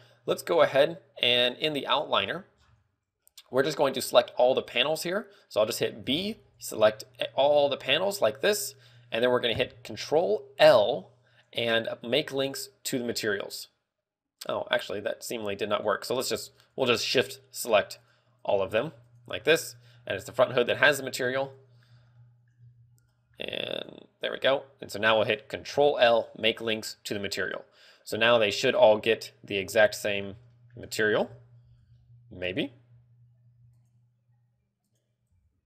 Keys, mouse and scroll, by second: 1.8-2.1 scroll down 8, 8.2 b, 17.2 shift+click, 21.8 middle click, 23.2 scroll up 2, 23.2 z, 23.5 middle click, 24.1 shift+right click, 24.8 middle click, 30.1 scroll down 1, 30.1 z, 30.4 middle click, 30.7 z, 30.9 middle click, 31.6 KP_0, 32.3 scroll up 1, 32.3 z, 33.8 scroll up 4, 33.8 z, 34.4 right click.